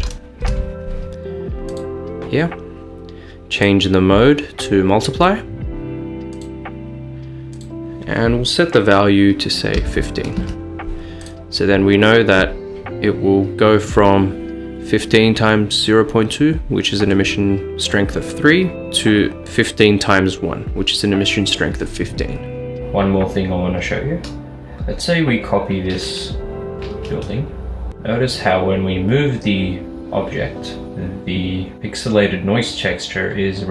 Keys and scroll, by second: 0.0-1.2 typing, 3.3-4.0 typing, 10.4 typing, 10.5 Return, 26.0 d, 27.0 z, 27.9 g, 27.9 z.